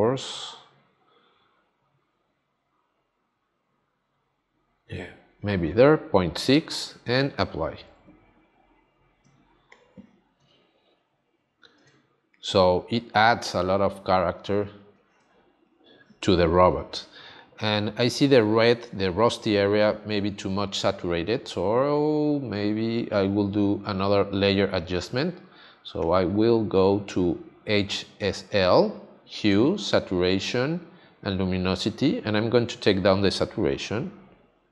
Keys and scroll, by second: 9.2 space, 11.8 space, 15.2 space.